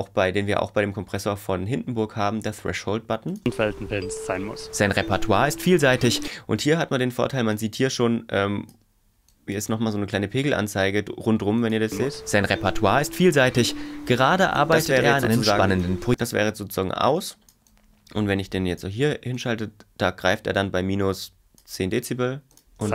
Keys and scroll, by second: 3.4 space, 6.3 space, 11.9 space, 14.9 space, 22.8 space.